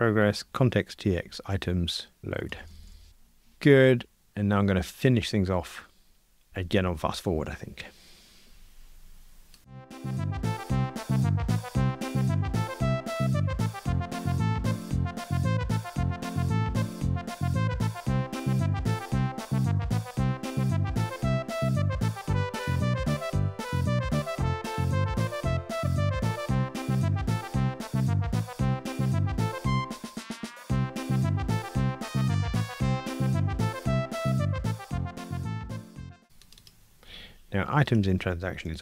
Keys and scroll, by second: 2.2 alt+shift+Right, 10.0 shift+super+F12, 10.4 super+b, 10.8 super+b, 11.4 Return, 12.0 Return, 12.1 Tab, 12.2 super+BackSpace, 12.3 ctrl+r, 12.8 super+b, 13.8 Return, 14.1 super+c, 14.3 super+v, 14.7 super+[, 15.4 Return, 15.7 Return, 15.8 Tab, 15.9 super+[, 16.6 Return, 16.8 Tab, 17.0 Escape, 17.1 alt+shift+Left, 17.4 Tab, 17.5 super+b, 17.6 super+c, 17.8 super+v, 18.1 Return, 18.2 alt+shift+Left, 18.3 alt+shift+Right, 18.4 Return, 18.6 Tab, 18.7 alt+super+l, 18.9 super+[, 18.9 ctrl+r, 19.6 Escape, 19.8 Return, 19.9 alt+shift+Left, 20.0 Delete, 20.2 super+[, 21.1 super+z, 21.2 alt+shift+Left, 21.3 alt+shift+Right, 21.4 super+F9, 21.6 ctrl+r, 22.1 Tab, 22.7 alt+shift+Left, 22.8 Escape, 23.1 alt+Up, 23.3 ctrl+r, 25.0 Escape, 25.2 super+z, 27.2 Escape, 27.7 ctrl+r, 28.2 ctrl+alt+h, 28.5 alt+Up, 28.7 ctrl+r, 29.1 Escape, 29.6 Escape, 29.8 super+c, 30.2 super+v, 30.6 Tab, 31.1 super+c, 31.5 ctrl+r, 32.2 Escape, 32.4 ctrl+r, 33.0 Escape, 33.9 ctrl+r, 35.1 super+BackSpace, 35.2 ctrl+r, 35.6 super+[, 36.0 super+BackSpace, 36.1 ctrl+r, 38.7 alt+Return.